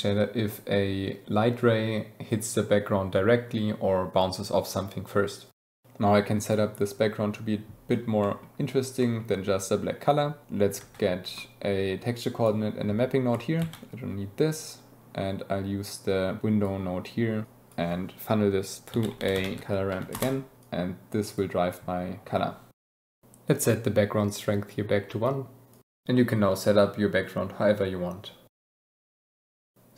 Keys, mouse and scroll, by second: 2.8-3.9 drag, 5.8 middle click, 8.1 middle click, 8.9 middle click, 10.9 ctrl+t, 11.3 click, 12.1 drag, 13.6 ctrl+x, 16.4 middle click, 17.4 middle click, 20.6 middle click, 22.7 click, 23.9-25.3 drag.